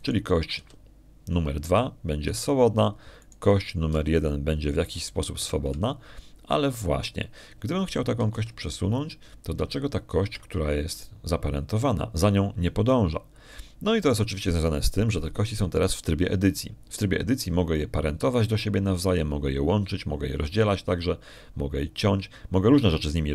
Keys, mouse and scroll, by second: 1.8 click, 2.4 g, 4.1 Escape, 5.1 right click, 5.8 g, 7.2 Escape, 10.2 g, 12.1 Escape, 12.8 right click.